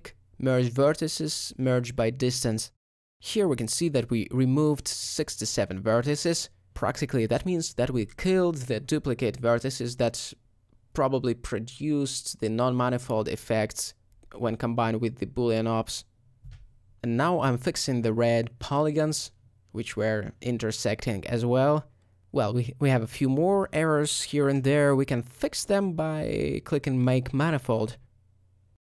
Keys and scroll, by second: 9.6 alt+a, 12.1 ctrl+z, 12.1-16.0 typing, 17.3 alt+2, 19.1 shift+f, 20.5 shift+f, 21.6 Tab, 23.5 alt+Tab.